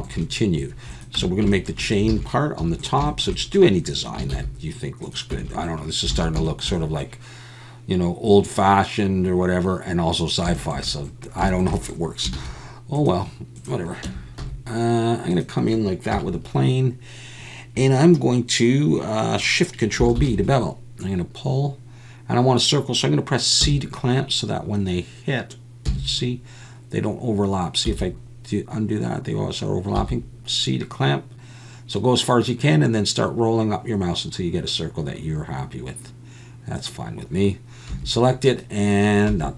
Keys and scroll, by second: 1.2 Tab, 2.1 alt+a, 2.6 3, 4.3 shift+s, 5.3 Tab, 6.1 alt+a, 12.3 shift+a, 14.0 Tab, 14.4 s, 16.1 KP_7, 23.6 c, 25.9 c, 27.9 c, 30.0 c, 37.9 a.